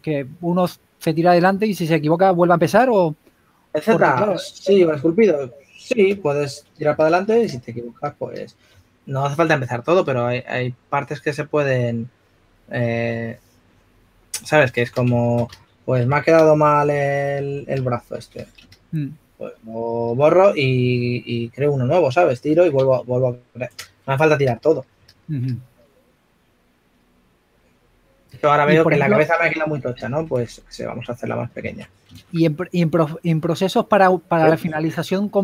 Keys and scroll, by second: 0.9 s, 2.4-3.1 typing, 9.6 4, 15.6 shift+s, 18.5 shift+s, 23.1 super+z, 25.7 s, 26.4 s, 28.3 s, 33.6 s, 35.1 super+z.